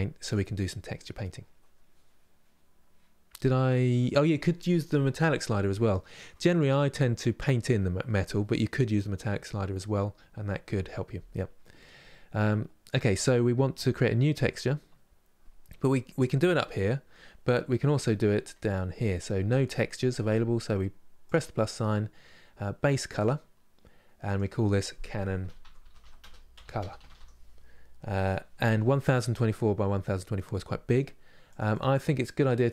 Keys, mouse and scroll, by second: 0.0 click, 11.6 scroll up 5, 12.1-31.2 middle drag, 31.4-32.7 drag.